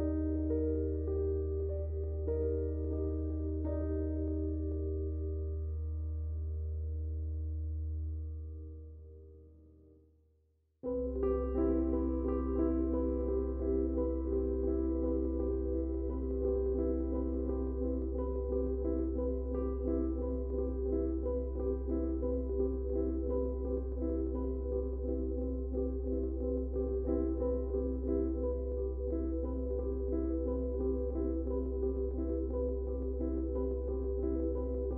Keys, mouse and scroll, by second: 2.4 ctrl+a, 3.4 click, 7.9-12.9 drag, 19.0-30.4 drag, 30.9 space, 31.0 click, 32.4 Right, 34.1 click.